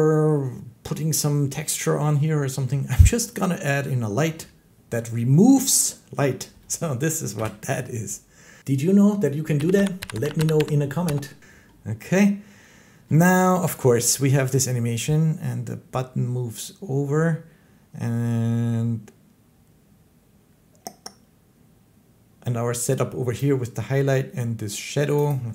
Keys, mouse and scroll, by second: 5.7-8.4 middle drag, 7.2 7, 11.2 scroll, 11.2 7, 11.5 middle click, 13.3-18.4 shift+middle drag, 23.2 click, 25.1 click, 25.2 click.